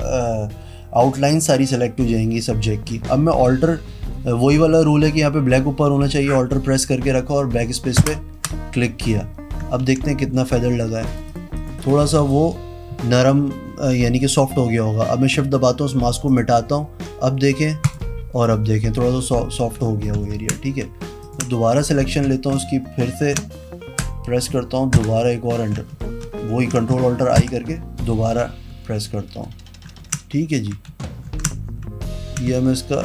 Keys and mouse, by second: 8.2 alt+BackSpace, 10.0 ctrl+d, 10.6 z, 11.3 click, 11.5 click, 11.7 click, 12.0 click, 12.4 click, 16.5 shift+click, 18.0 shift+click, 20.4 ctrl+KP_Subtract, 21.4 ctrl+click, 21.5 click, 24.1 KP_Enter, 25.2 alt+BackSpace, 26.1 ctrl+z, 26.7 ctrl+shift+i, 27.6 alt+BackSpace, 30.2 ctrl+d, 31.1 ctrl+z, 31.5 ctrl+z.